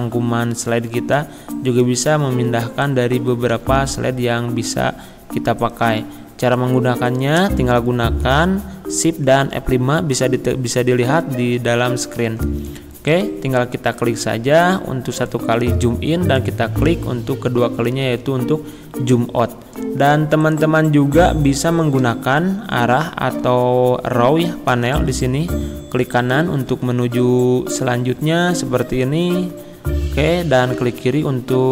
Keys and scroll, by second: 2.3 ctrl+z, 3.5 ctrl+z, 11.4 shift+F5, 24.7 Right, 30.7 Left.